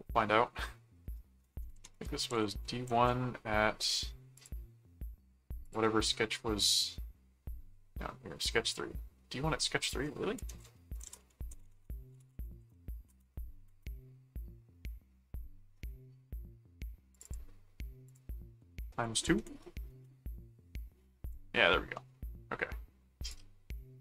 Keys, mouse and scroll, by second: 1.7-3.0 typing, 4.4 click, 5.6 click, 9.8 click, 10.5-13.4 typing, 17.1 click, 18.0 click, 18.9-19.8 typing, 21.2 click, 21.9 middle click, 23.2 click.